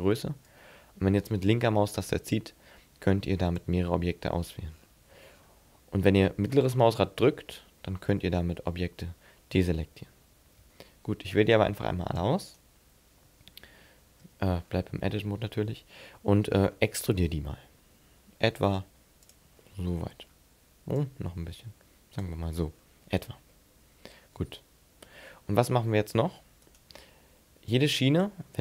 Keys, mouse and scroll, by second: 12.5 right click, 13.3 Tab, 14.0 scroll up 2, 14.2 Tab, 14.5-14.9 scroll down 6, 15.4 middle click, 16.1-16.5 scroll up 3, 16.6-16.9 scroll down 3, 17.0 e, 19.3 click, 19.6-20.9 scroll down 5, 20.9 scroll down 1, 21.0 click, 22.6 scroll up 7, 23.5 middle click, 25.3 shift+middle click, 26.6 right click, 27.7 click.